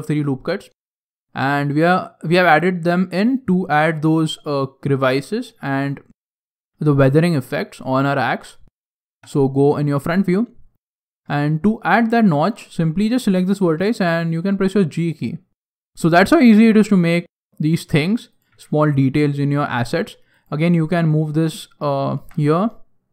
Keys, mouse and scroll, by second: 0.5-0.8 scroll up 3, 0.8 shift+middle click, 1.8 right click, 2.4 middle click, 3.3 middle click, 3.8 shift+middle click, 4.6 shift+middle click, 5.6 middle click, 9.1 KP_3, 10.0 scroll up 4, 10.1-10.7 scroll down 1, 10.7 scroll down 1, 10.7-11.2 scroll down 1, 11.4 shift+middle click, 12.0 shift+middle click, 13.7 g, 15.7 Tab, 15.7 shift+middle click, 15.7 scroll down 13, 16.1 scroll down 1, 16.4 shift+middle click, 17.4 shift+middle click, 17.5 shift+middle click, 18.3 right click, 18.5 g, 20.3 right click, 20.4 g.